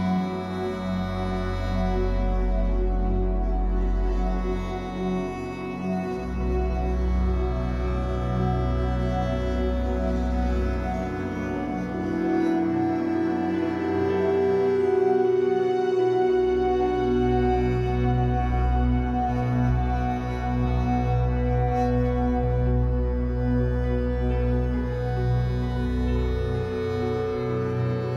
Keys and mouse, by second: 1.1 click, 1.8 click, 3.3 click, 4.0 click, 4.9 click, 7.6 ctrl+click, 7.8 ctrl+click, 9.4 click, 11.3-15.6 drag, 15.8-20.4 drag, 21.1 BackSpace, 21.3 BackSpace, 21.6 7, 21.9 Return, 24.9 click, 25.8-26.9 typing.